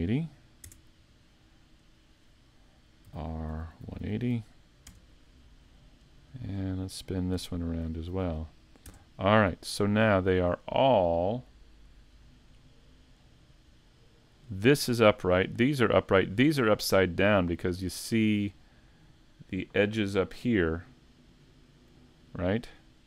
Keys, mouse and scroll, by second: 13.9 scroll down 5.